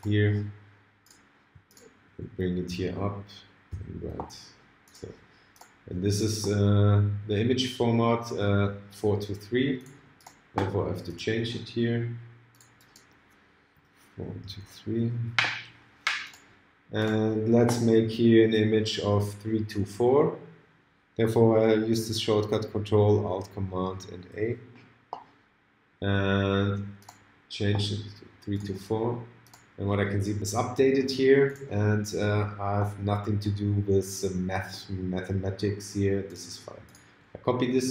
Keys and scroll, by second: 13.7 4, 15.0 shift+3, 24.3 ctrl+alt+super+a.